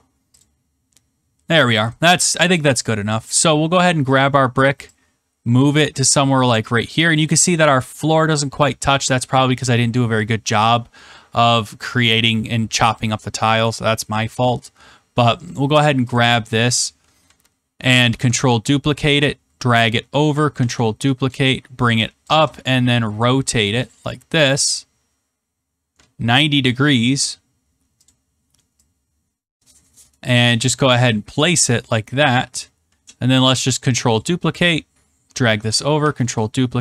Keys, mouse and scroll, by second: 0.3 click, 1.2-2.5 scroll, 2.5 click, 3.4 right click, 4.1 click, 6.8 click, 7.6-7.9 scroll, 15.5 click, 16.1 click, 18.0 ctrl+d, 20.1 shift+click, 20.5 ctrl+d, 22.2 shift+click, 23.6 click, 26.6 ctrl+click, 28.0 click, 31.3 click, 32.3 shift+click, 33.5 ctrl+d, 35.5 shift+click, 35.9 ctrl+d.